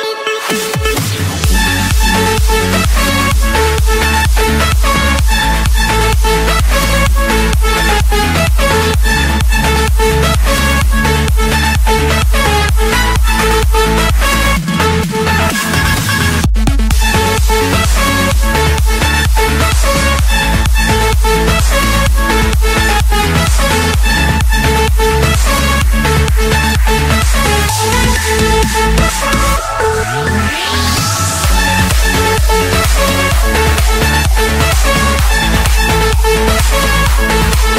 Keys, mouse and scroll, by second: 2.2 click, 7.2 F8, 8.7 click, 10.3 click, 10.5 Escape, 11.6 click, 12.5 click, 14.2 Return, 15.0 click, 15.3 click, 16.4 typing, 17.0 Return, 18.6 click, 19.3 click, 19.6 Return, 20.8 Escape, 21.1 Escape, 22.5 click, 23.6 click, 24.7 click, 25.2-26.1 scroll down 6, 26.2 Escape, 27.0 typing, 27.3 Return, 29.1 click, 31.0 6, 31.2 6, 31.7 Return, 32.9-33.3 scroll down 2, 33.5 Escape, 34.1-34.6 scroll down 2, 35.3 scroll up 2, 35.8 click, 36.1 click, 36.9 m, 37.3 Return.